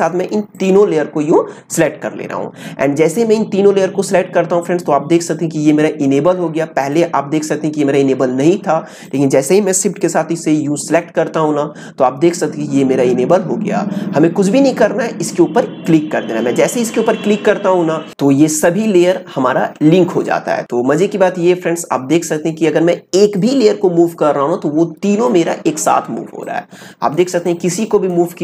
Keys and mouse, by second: 9.0 click, 23.3-28.4 drag.